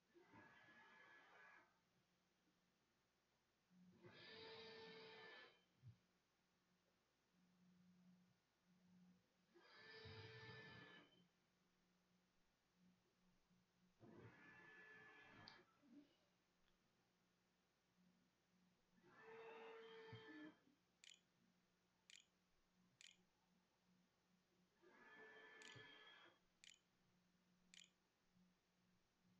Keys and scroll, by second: 19.7-20.8 typing, 21.2 Return, 21.5 Delete, 21.9 BackSpace, 22.4 Return, 22.9 Return, 23.4 ', 24.4-26.4 typing, 27.5-29.3 typing.